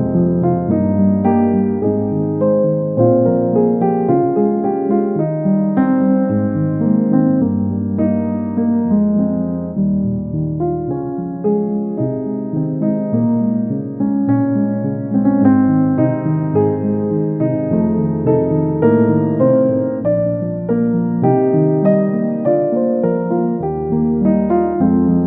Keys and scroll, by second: 15.1 ctrl+d.